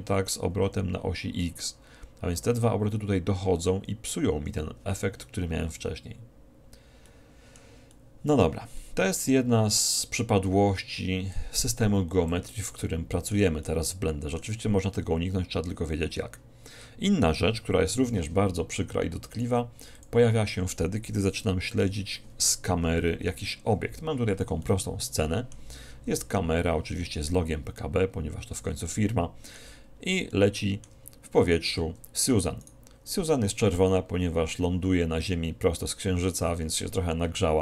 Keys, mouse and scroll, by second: 7.1-11.6 middle drag, 11.6-13.1 drag, 12.9-16.8 middle drag, 20.1-21.1 drag, 21.8 4, 23.0 KP_1, 24.6-28.0 middle drag, 28.9-32.2 middle drag, 32.4 middle click, 32.6 click, 33.0-34.6 middle drag.